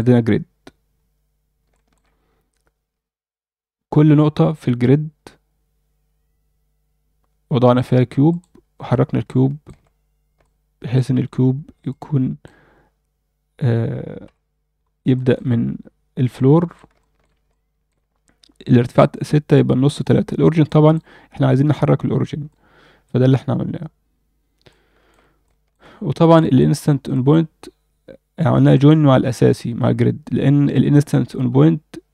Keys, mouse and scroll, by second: 0.9 scroll down 1, 1.7 alt+shift+middle click, 8.3 click, 8.9-9.6 alt+middle drag, 10.4-10.9 alt+middle drag, 11.9-12.4 alt+middle drag, 14.2 KP_1, 14.7 scroll up 2, 15.1 alt+shift+middle drag, 16.3-16.7 alt+middle drag, 17.0 alt+shift+middle drag, 17.5-17.9 alt+middle drag, 20.6 alt+middle click, 21.1-21.7 scroll up 1, 21.7 scroll up 1, 22.5 alt+middle click, 24.1-24.6 scroll down 1, 24.7 alt+shift+middle click, 25.4 alt+shift+middle click, 26.4 alt+middle click, 27.1 click, 28.7 click, 30.8 click.